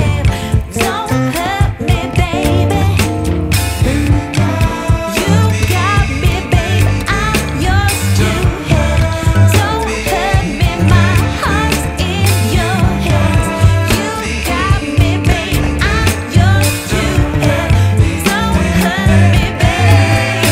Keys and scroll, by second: 7.0 space, 13.2 shift+Page_Up, 13.6 ctrl+z, 14.2 alt+c, 14.3 alt+w, 14.9 p.